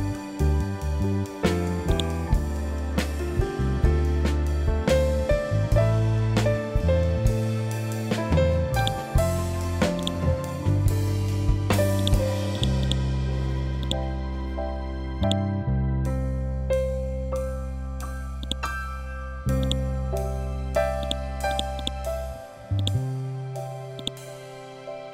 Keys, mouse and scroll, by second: 8.7 click, 9.9 right click, 11.9 click, 12.8 right click, 13.7-18.3 drag, 19.5 right click, 20.9 click, 21.7 right click, 22.7-25.1 drag.